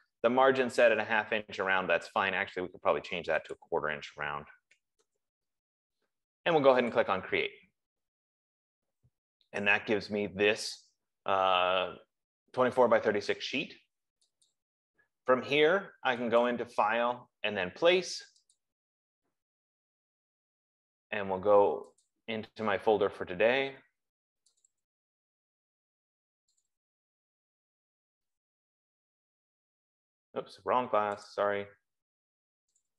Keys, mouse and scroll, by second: 4.1 click, 5.0-5.4 typing, 7.6 click, 14.9 click, 17.0 click, 18.9 click, 22.4 click, 25.1 click, 25.5 click, 27.1 click, 27.5 click, 28.7 scroll down 2, 29.5 scroll down 2, 31.6 click, 32.9 scroll.